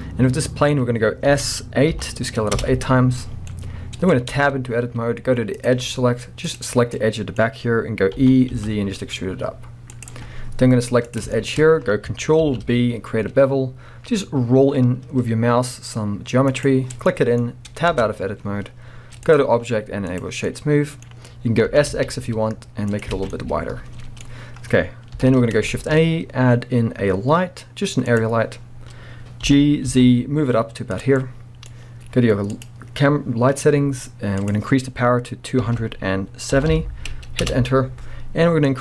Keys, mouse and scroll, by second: 1.3 s, 2.6 Return, 3.3 scroll down 2, 3.5 middle click, 4.4 Tab, 5.5 click, 6.5 click, 6.9-10.0 middle drag, 8.1 e, 10.0 click, 10.6-11.0 scroll down 1, 11.0 click, 11.3-12.7 shift+middle drag, 11.6-12.4 scroll up 1, 12.4 ctrl+b, 14.1-16.6 middle drag, 16.6 click, 17.1-19.3 middle drag, 17.9 Tab, 18.1-18.5 scroll down 1, 19.3-20.5 drag, 20.5-23.1 middle drag, 21.7 s, 23.0 click, 23.1 alt+a, 23.2 alt+scroll down 1, 23.3-31.0 middle drag, 25.1 KP_1, 25.8 shift+a, 28.6-29.4 scroll up 1, 29.4 g, 31.0 click, 31.2-32.5 middle drag, 32.5 click, 34.4-38.8 drag, 37.5 Return.